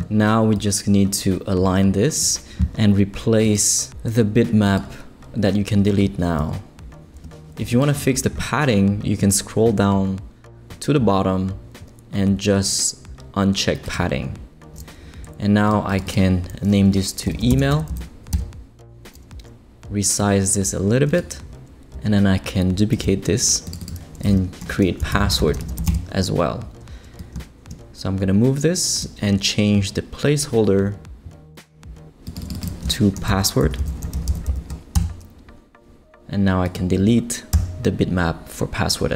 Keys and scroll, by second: 6.4 BackSpace, 17.3-18.2 typing, 18.3 Return, 22.9 super+d, 24.4-26.3 typing, 32.9-35.0 typing, 35.8 Return, 37.5 BackSpace.